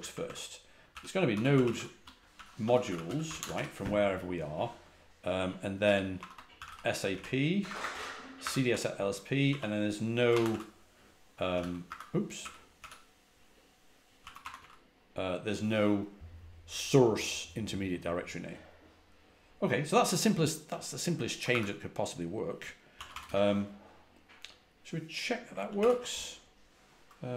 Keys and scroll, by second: 0.0-3.9 typing, 5.5-8.8 typing, 9.9-12.7 typing, 13.9-15.0 typing, 21.4 typing, 22.6-23.5 typing, 25.5 ctrl+a, 25.7 ctrl+h.